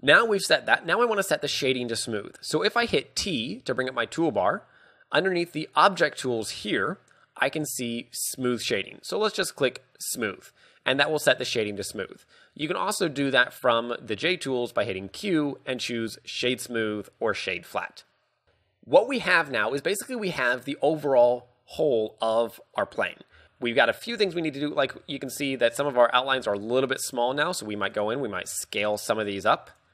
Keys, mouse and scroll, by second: 3.3 t, 4.8 scroll up 2, 5.9 click, 5.9-6.5 scroll up 2, 15.2 q, 18.5 shift+space, 23.7 Tab, 24.4 z, 24.8 z, 25.5 alt+right click, 26.5 s, 28.2 click, 28.4 a, 28.9 alt+right click.